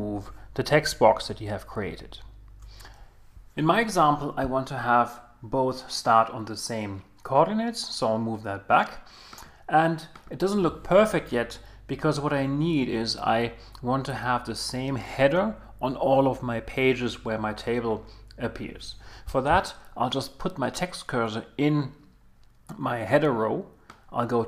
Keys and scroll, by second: 1.8 super+z.